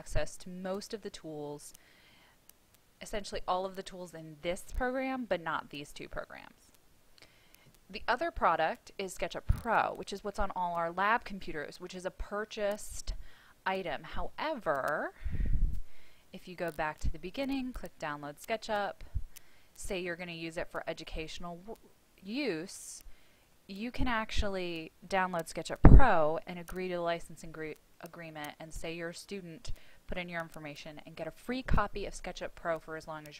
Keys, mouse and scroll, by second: 13.6-14.8 scroll up 1, 16.1-18.2 drag.